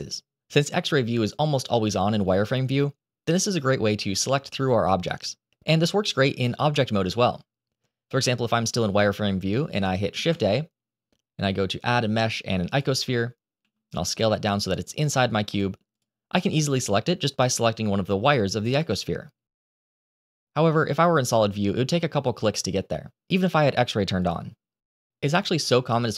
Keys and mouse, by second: 2.4 click, 6.6 Tab, 10.0 shift+a, 13.5 s, 14.4 click, 15.4 middle click, 15.8 click, 16.2-17.3 middle drag, 18.6 click, 20.6 click, 21.8 click, 22.2 click, 25.9 click.